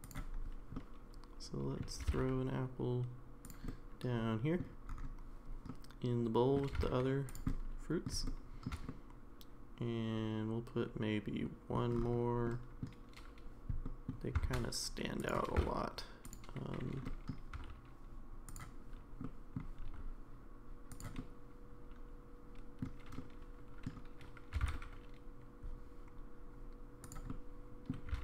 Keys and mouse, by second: 0.8-1.8 middle drag, 2.0 g, 3.7-4.6 middle drag, 5.7-6.6 middle drag, 6.7 g, 7.5-8.0 middle drag, 8.3-8.7 shift+middle drag, 8.9-11.8 middle drag, 12.4-12.8 middle drag, 13.8 middle drag, 14.5 shift+d, 15.5 g, 17.0 middle click, 17.5 r, 19.2-19.6 middle drag, 19.9 r, 21.2-22.8 middle drag, 23.2-23.8 middle drag, 24.5 r, 27.3 middle click, 28.1 g.